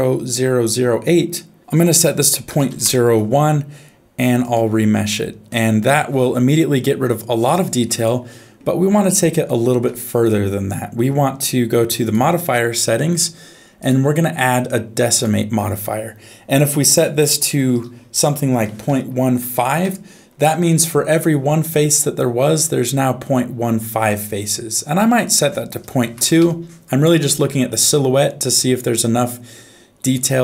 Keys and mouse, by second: 1.6-2.9 drag, 4.4-5.4 drag, 7.5 right click, 9.4 shift+middle click, 13.9-15.2 drag, 17.0-19.8 drag, 21.7-23.8 middle drag, 25.4-26.4 drag, 27.4 middle click.